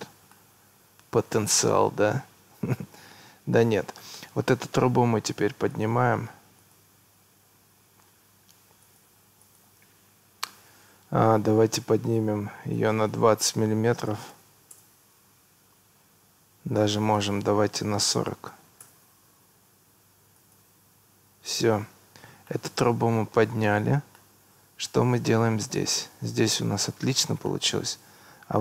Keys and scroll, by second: 14.1 2, 14.4 0, 14.8 Return, 18.3 4, 18.5 0, 18.9 Return.